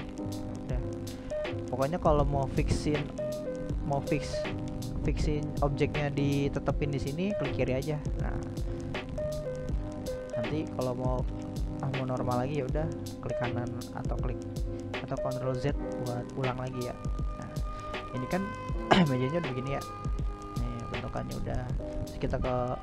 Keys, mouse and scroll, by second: 2.3 e, 5.9 ctrl+z, 7.5 e, 11.3-18.4 middle drag, 18.4-19.5 drag, 19.5 middle click, 20.0 right drag, 20.3-21.7 middle drag, 21.7 right drag, 22.5 right click.